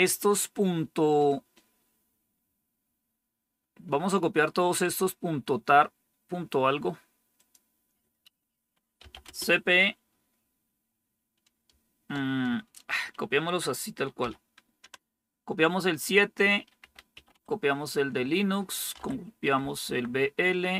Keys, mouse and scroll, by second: 7.3 click, 8.7-9.6 typing, 14.1-14.7 typing, 16.7-17.6 typing, 18.9-19.5 typing.